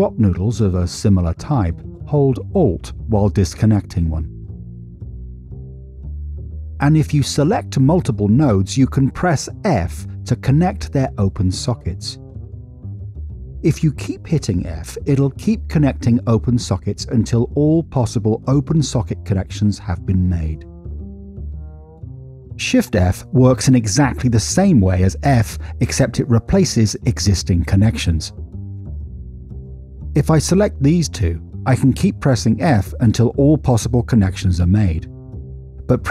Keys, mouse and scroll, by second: 1.1 click, 6.5 middle click, 7.4 middle click, 10.1 click, 12.2 f, 14.7 f, 17.0 f, 19.2 f, 21.2 middle click, 22.1 middle click, 29.7 drag, 32.0 f, 32.6 f, 33.1 f, 34.6 f.